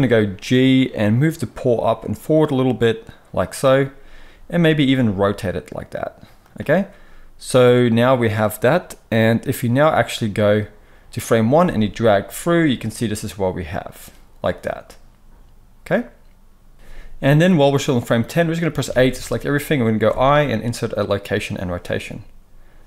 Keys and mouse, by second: 4.8 r, 9.8-22.8 drag, 18.8 a, 20.0 i.